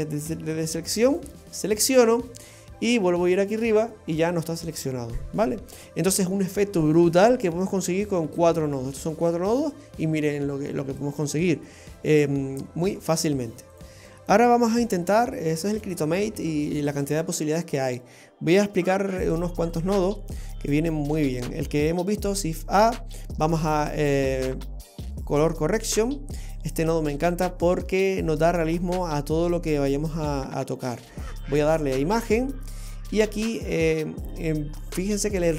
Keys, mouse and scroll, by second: 3.5 click, 5.4-9.7 scroll down 10, 12.7-13.7 scroll up 3, 13.7 click, 14.9 Delete, 15.8 click, 16.1 Delete, 16.6 click, 16.9 Delete, 17.7 scroll up 1, 19.7 click, 22.3 shift+a, 26.7-27.1 scroll up 6, 27.7 middle click, 29.1 click, 31.4 click, 32.6-33.9 scroll up 6, 33.9 middle click.